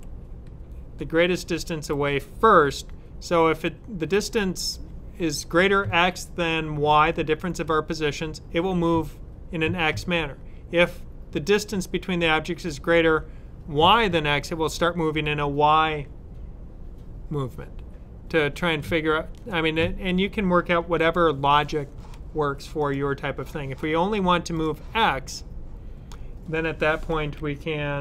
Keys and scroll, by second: 21.2 super+w.